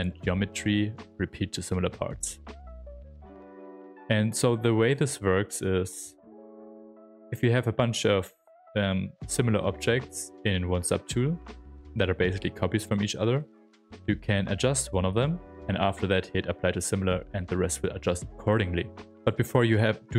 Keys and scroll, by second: 5.9 s.